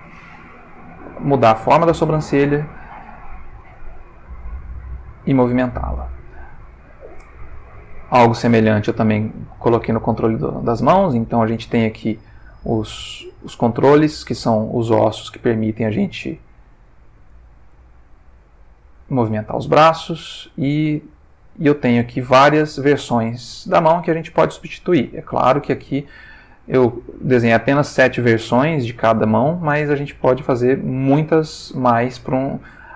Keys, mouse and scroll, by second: 1.3 g, 2.7 click, 3.9-4.9 ctrl+middle drag, 5.3 click, 6.2-7.2 shift+middle drag, 8.2 click, 9.8 g, 10.5 Escape, 11.5 click, 12.3 r, 13.5 click, 14.0 click, 14.6 r, 17.2 click, 17.9 shift+middle click, 18.9 click, 20.2-31.9 drag, 32.6-32.9 ctrl+middle drag.